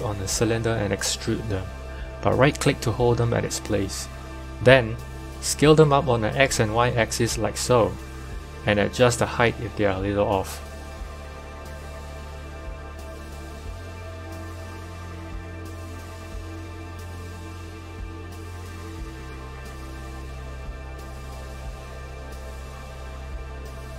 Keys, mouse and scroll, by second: 1.1 e, 3.5 s, 9.1 Tab, 10.7-11.8 scroll down 1, 11.8 Tab, 12.5 1, 12.9 click, 13.8-14.9 scroll up 1, 14.9 g, 21.0-22.1 scroll down 3, 22.1 click, 22.1-22.5 scroll down 1, 22.8-23.3 scroll up 1, 23.3 g.